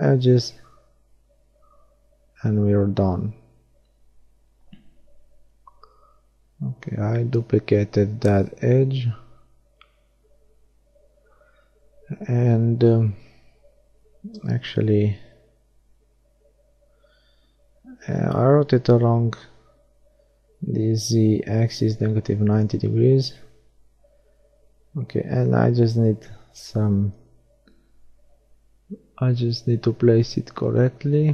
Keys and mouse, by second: 2.7 shift+d, 10.3-12.7 middle drag, 13.9 r, 21.3-24.1 middle drag, 24.1 g, 26.7-27.7 drag, 28.5 middle click.